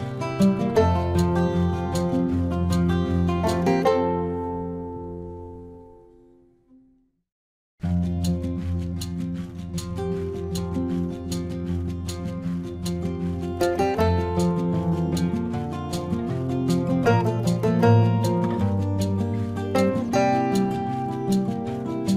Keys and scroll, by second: 2.2 space, 4.1 space, 5.6 space, 7.4 ctrl+alt+z, 8.4 ctrl+-, 9.6 space, 10.7 ctrl+alt+z, 14.5 space, 16.5 ctrl+-, 17.3 ctrl+alt+z, 18.3 ctrl+-, 18.8 space, 20.0 ctrl+alt+z, 20.2 space, 21.0 ctrl+alt+z.